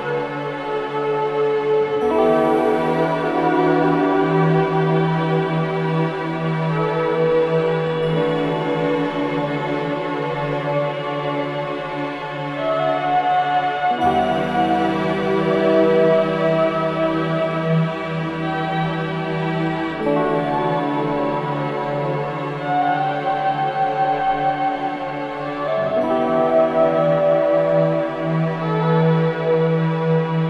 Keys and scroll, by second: 9.1 ctrl+j, 21.4 ctrl+z, 26.2 ctrl+g.